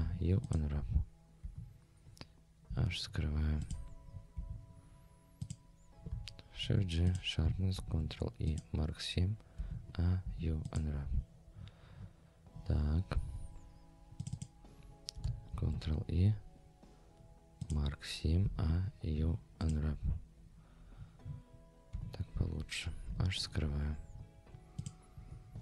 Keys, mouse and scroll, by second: 0.0 u, 1.4 Tab, 2.7 h, 3.1-3.5 scroll down 2, 3.6 click, 4.1 scroll up 2, 4.3 Tab, 5.4 click, 6.6 shift+g, 7.8 ctrl+e, 9.6 a, 10.2 u, 11.6-12.2 scroll up 4, 13.2 scroll down 2, 14.2 click, 14.4 click, 15.5 ctrl+e, 18.4 a, 19.1 u, 20.4-21.2 scroll down 2, 21.2 scroll down 2, 21.9 Tab, 23.1 h, 23.4-24.1 scroll down 2, 24.1-24.4 scroll up 2, 24.8 click, 25.1 Tab, 25.5-25.6 scroll up 2.